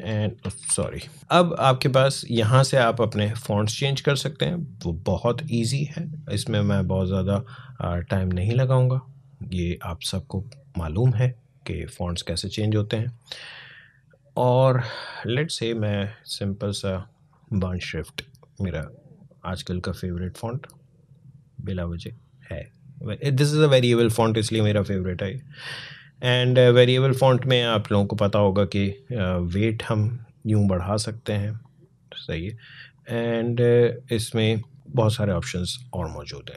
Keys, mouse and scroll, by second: 0.4 ctrl+z, 2.7 click, 10.7 click, 13.3 click, 14.9-17.0 scroll down 1, 20.5 click, 26.3-36.5 drag.